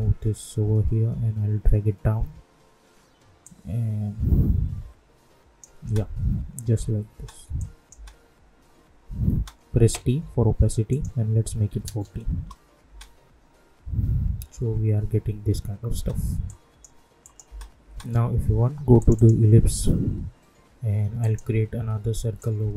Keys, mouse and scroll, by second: 1.0 Down, 3.4-5.8 drag, 5.8 space, 7.5 click, 7.9 space, 10.2 t, 10.8 click, 12.3 Return, 12.8 space, 15.9 space, 16.4 click, 17.4 space, 18.9-22.7 drag.